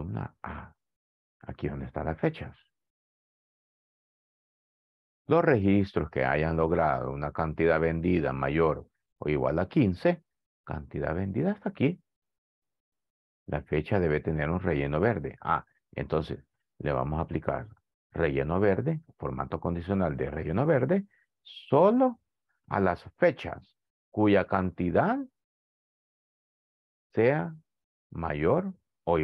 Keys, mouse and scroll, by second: 0.4 click.